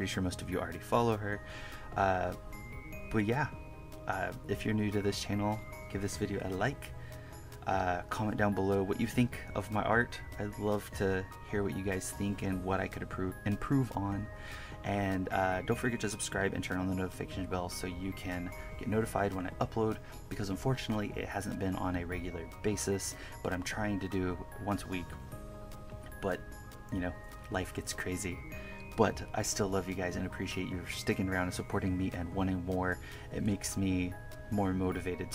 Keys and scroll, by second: 0.1 1, 1.0 1, 2.3 KP_Subtract, 2.9 KP_Add, 3.0 1, 3.2 KP_Add, 3.4 1, 3.6 1, 3.7 KP_Subtract, 4.2 KP_Subtract, 4.3 KP_Add, 4.7 1, 5.4 1, 5.8 KP_Subtract, 7.1 1, 17.5 1, 18.1 1, 21.5 1, 23.8 KP_Add, 24.7 1, 25.8 KP_Subtract, 26.4 KP_Add, 27.8 1, 28.9 KP_Subtract, 29.2 KP_Add, 29.4 1, 29.5 KP_Subtract, 32.7-35.3 typing, 33.2 KP_Subtract, 34.7 KP_Add.